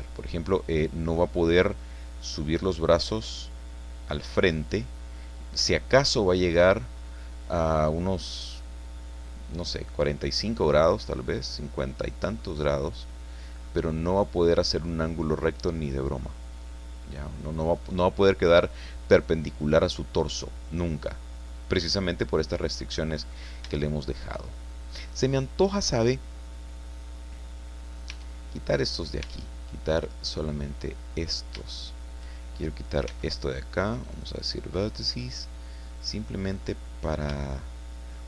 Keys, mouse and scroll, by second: 0.6 click, 1.8-2.9 drag, 12.1-12.4 scroll down 2, 12.4-13.8 middle drag, 14.9-15.9 middle drag, 16.0 scroll down 2, 16.2-17.3 middle drag, 17.3 click, 17.8-18.9 drag, 20.4 scroll down 1, 20.6-21.7 drag, 22.5 click, 23.2-23.5 scroll up 1, 23.7 shift+middle click, 24.4-24.7 shift+scroll up 1, 24.9 scroll down 1, 25.1-27.1 middle drag, 27.1 click, 28.1 Tab, 28.9 right click, 29.2 Tab, 30.1 right click, 31.1-31.5 scroll up 2, 33.0 x, 34.1 click, 34.8 scroll down 1, 35.1-36.6 middle drag, 36.6 scroll up 1, 36.9-38.2 middle drag.